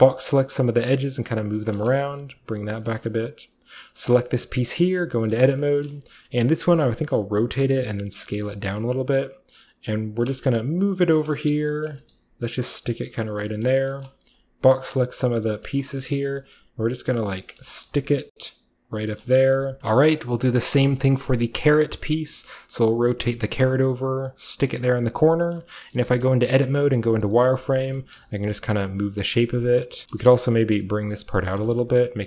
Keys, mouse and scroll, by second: 0.0-0.6 typing, 1.5 click, 1.8-2.5 typing, 2.1 click, 2.8-4.8 drag, 3.0 Tab, 4.9 Tab, 5.2 a, 5.6 b, 6.3 a, 6.7 r, 7.4 click, 7.8 s, 8.5 click, 8.7 g, 10.0 click, 10.3 Tab, 10.4-19.8 typing, 11.2 click, 11.9 click, 12.5 click, 12.9 click, 13.2 click, 13.7 Tab, 14.4 click, 15.5 click, 16.2 click, 16.9 click, 17.2 click, 17.5 click, 18.0 click, 18.8 click, 19.4 click, 19.8-21.1 middle drag, 21.2-22.5 middle drag, 21.2-22.2 scroll up 1, 22.2 scroll up 1, 22.5 click, 22.5-24.3 typing, 23.4 click, 24.2 click, 24.6 click, 24.8 Tab, 25.5-32.2 typing, 26.3 click, 27.1 click, 27.7 click, 28.2 click, 28.9 click, 29.4 click, 29.7 click, 30.0 click, 30.3 click, 31.1 click, 31.5 click, 31.9 click.